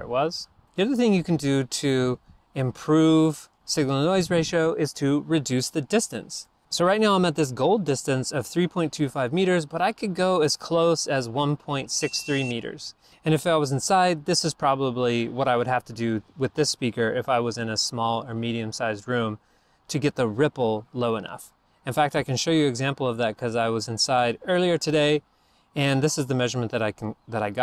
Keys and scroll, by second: 6.4 super+Tab, 22.1 super+Tab.